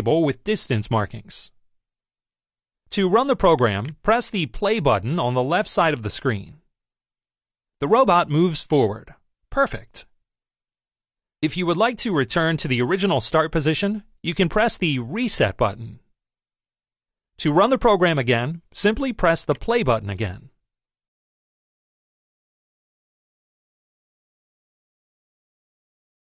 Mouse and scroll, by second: 3.7 click, 14.5 click, 19.4 click.